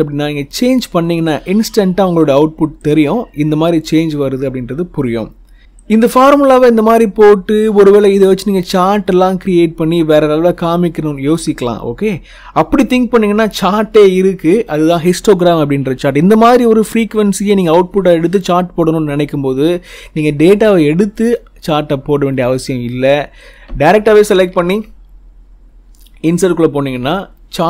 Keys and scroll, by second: 24.1 ctrl+shift+Left, 24.4 ctrl+shift+Down.